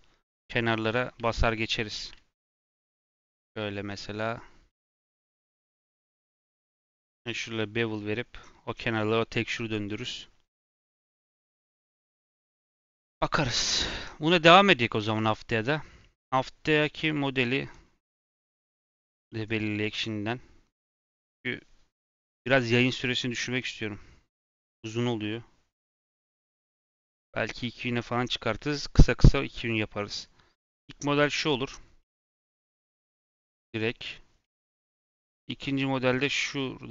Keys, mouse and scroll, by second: 2.4 alt+click, 5.4 alt+shift+click, 6.5 alt+shift+click.